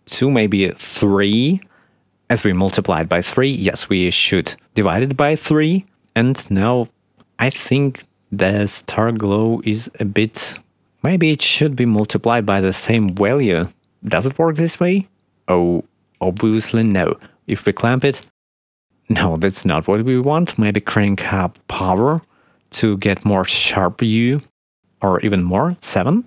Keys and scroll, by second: 0.7 2, 1.9 3, 2.9 3, 16.4 1, 19.3 2, 21.6 3, 25.9 7.